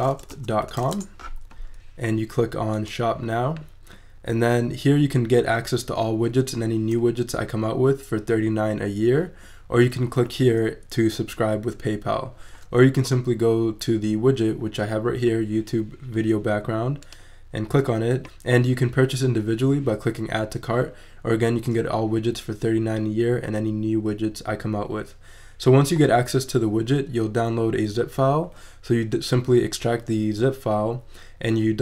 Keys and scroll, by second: 0.0-0.7 typing.